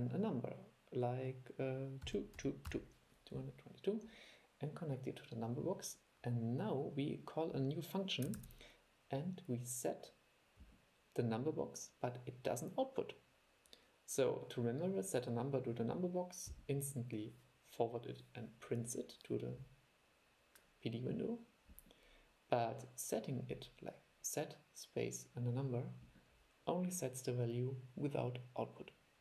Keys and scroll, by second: 8.5 super+e.